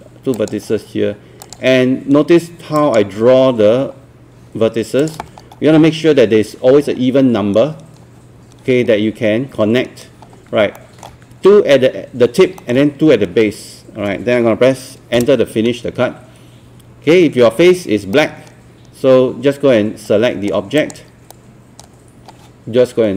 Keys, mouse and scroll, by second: 5.4-6.5 scroll up 1, 10.8 alt+middle click, 12.6 alt+middle click, 15.2 Return, 18.2-20.6 right drag, 20.8 click, 21.3-22.6 right drag.